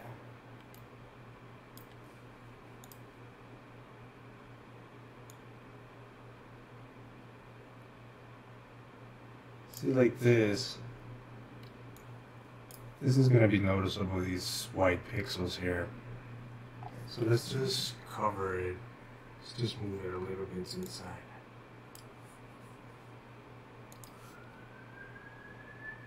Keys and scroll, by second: 1.8 typing, 11.7-13.3 typing.